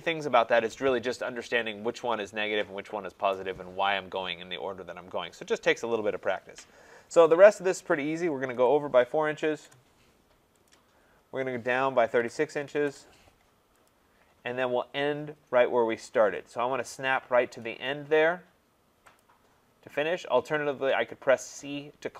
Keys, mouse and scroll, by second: 8.5 4, 9.4 shift+', 9.6 Return, 10.7 click, 12.0 typing, 12.8 Return, 13.9 click, 16.1-18.0 drag, 19.2 click.